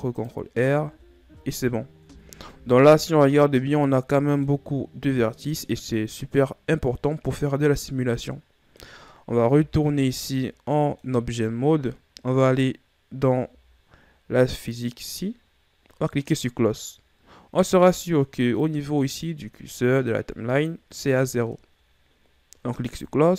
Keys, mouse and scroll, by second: 0.7 click, 1.4 Tab, 2.7 Tab, 3.2 a, 3.5-5.4 middle drag, 5.4-5.9 scroll up 1, 5.9 scroll down 1, 6.2-9.3 middle drag, 10.1 Tab, 10.7-11.1 scroll down 1, 11.1-14.1 middle drag, 15.3 click, 19.2 click.